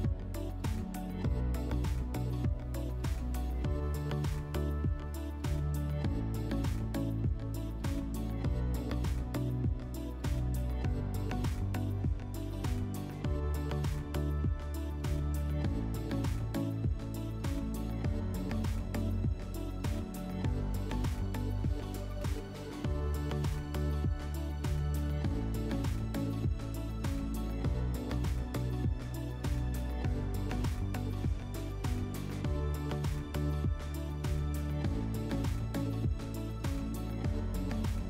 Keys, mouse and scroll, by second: 0.3 scroll, 0.6-2.5 scroll down 3, 2.5 drag, 3.8 click, 4.6 right click, 8.4-9.9 drag, 10.4-12.0 drag, 13.3-15.0 drag, 15.5-17.2 drag, 17.9 click, 19.2 click, 20.6 click, 23.2-24.7 drag, 24.7 click, 27.9-29.4 drag, 36.4-38.0 drag.